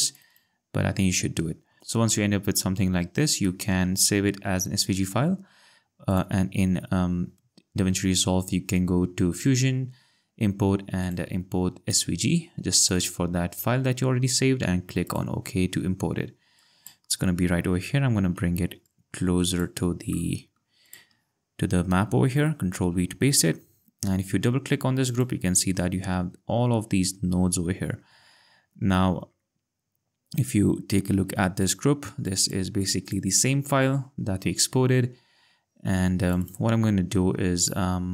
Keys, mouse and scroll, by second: 0.1 click, 1.8 ctrl+scroll, 5.4-6.1 scroll, 6.1 click, 9.3 click, 15.3 click, 18.2 ctrl+x, 18.9 click, 20.2 click, 20.6 click, 21.9 ctrl+v, 25.0 click, 25.8 scroll, 31.8 click, 36.3 click.